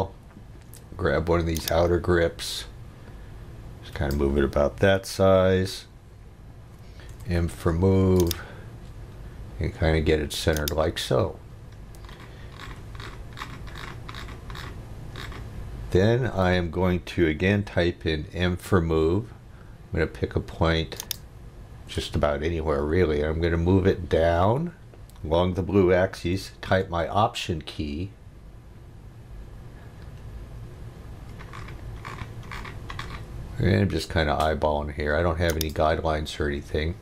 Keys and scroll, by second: 7.1 m, 18.4 m.